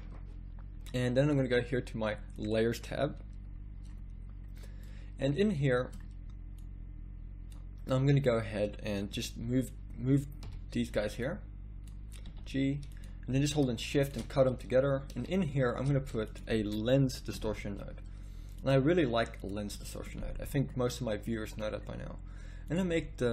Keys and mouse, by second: 18.8 a.